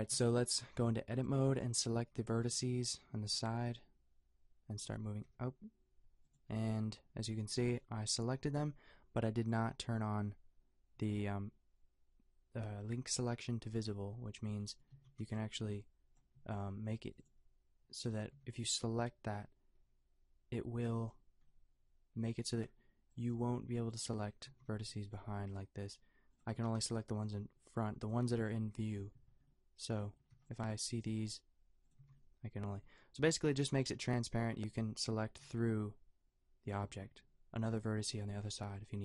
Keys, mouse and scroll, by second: 0.1 a, 0.9 b, 3.3 g, 5.3 g, 9.5-14.9 drag, 14.9 a, 15.2 b, 16.3 a, 18.4 b, 24.5 a, 24.7 b, 25.4 g, 26.5 a, 26.7 b, 27.4 g, 28.2 a, 30.3 b, 30.9 g, 32.0 a, 34.7 a, 35.1 a, 35.4 b, 36.9 a.